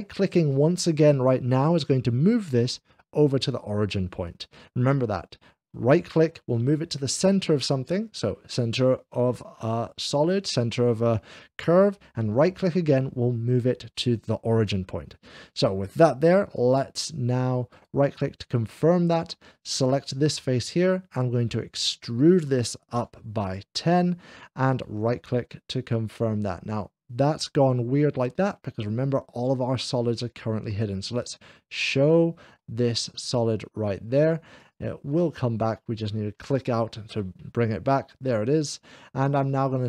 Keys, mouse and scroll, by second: 2.5-3.6 right drag, 4.1-5.5 middle drag, 7.2 scroll down 2, 7.2 g, 7.2 f, 12.8-14.3 middle drag, 13.0 g, 13.0 f, 17.6-18.6 right drag, 19.3 f, 19.3 3, 19.8 click, 20.0 scroll down 1, 21.2-23.4 drag, 24.6-25.6 right drag, 30.9 click, 32.4-34.0 middle drag, 34.4 click, 35.0 click, 35.5 middle click.